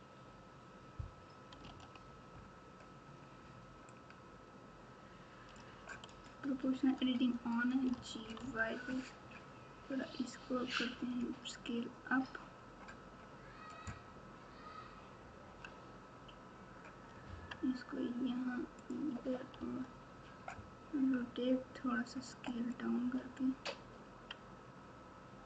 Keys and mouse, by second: 1.6 alt+z, 4.0-5.5 drag, 7.9 g, 19.5 r.